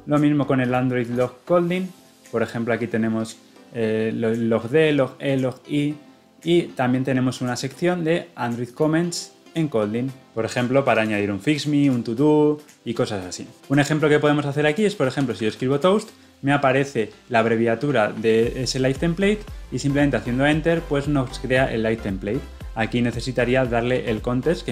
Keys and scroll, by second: 20.5 Return.